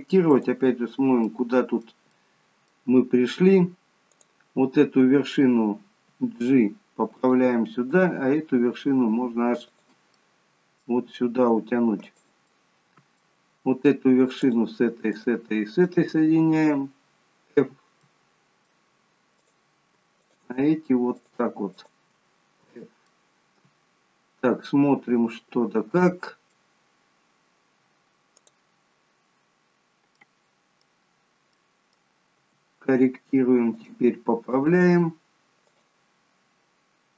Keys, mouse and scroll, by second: 0.5 click, 1.4 middle click, 2.2 middle click, 4.1 click, 6.1 g, 7.9 click, 8.3 g, 10.2 middle click, 11.1 g, 12.7 middle click, 14.6 shift+click, 15.5 shift+click, 17.7 f, 18.2 middle click, 19.5 click, 20.4 shift+click, 22.8 f, 23.2 middle click, 28.4 click, 30.2 middle click, 31.7 middle click, 32.4 g, 34.6 click, 35.0 g.